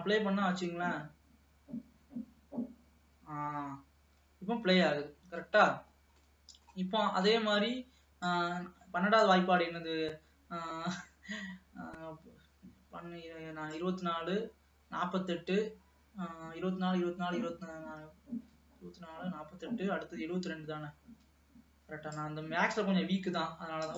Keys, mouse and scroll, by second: 0.1-1.7 scroll down 2, 4.3 space, 5.2-6.1 scroll down 5, 6.5 middle click, 7.2-8.6 scroll up 4, 8.6-11.6 drag, 14.1-17.0 drag.